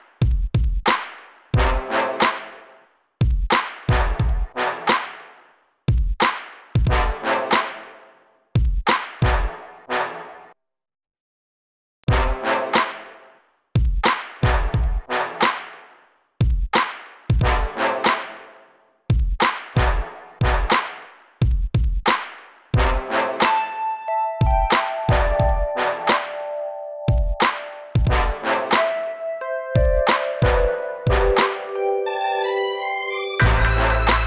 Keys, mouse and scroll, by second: 3.3 m, 4.3 click, 4.5 typing, 5.6 click, 7.8 click, 9.5 click, 12.9 right click, 13.0 right click, 13.5 click, 13.7 click, 15.4 click, 15.5 click, 16.0 click, 18.1 click, 19.3 click, 22.1 click, 25.1 click, 25.2 click, 25.4 click, 27.4 click, 27.5 click, 29.7 click, 32.0 click, 32.2 click, 34.0 click.